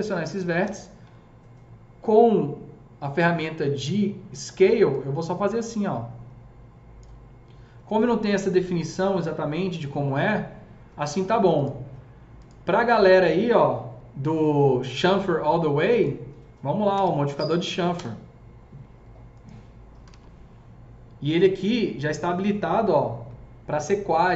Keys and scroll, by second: 0.6 ctrl+r, 16.6-17.7 typing, 17.9 Return, 19.7-20.6 typing.